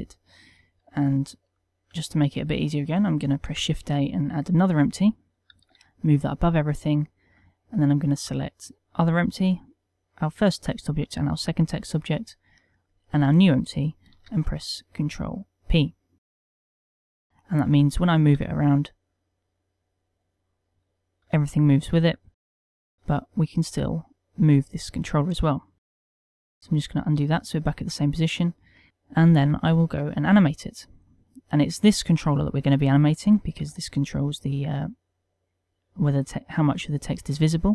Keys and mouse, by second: 1.7 ctrl+middle click, 2.1 shift+middle click, 4.1 shift+a, 6.0 g, 6.8 click, 8.9 click, 9.8 shift+click, 11.6 shift+click, 13.3 shift+click, 14.7 ctrl+p, 17.3 ctrl+middle click, 17.3 g, 17.9 right click, 18.8 g, 21.2 right click, 21.7 g, 22.4 click, 23.0 click, 23.4 g, 25.4 right click, 26.9 ctrl+z, 27.3 ctrl+z, 28.0 middle click, 28.9 middle click, 29.7 KP_1, 30.3 ctrl+middle click, 30.7 shift+middle click, 31.7 click, 34.1 g.